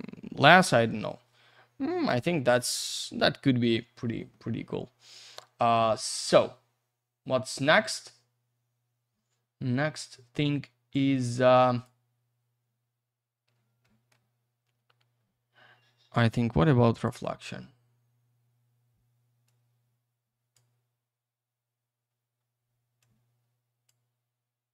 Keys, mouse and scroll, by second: 6.3 click, 13.8 middle click, 14.5-15.8 scroll up 1, 16.2 click, 19.4 click, 23.0 click.